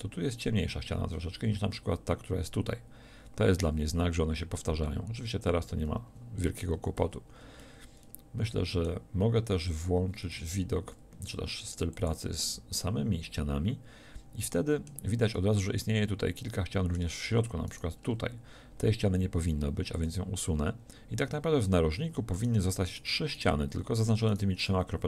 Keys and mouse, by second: 7.0 z, 9.3 z, 10.3 ctrl+Tab, 19.4 x.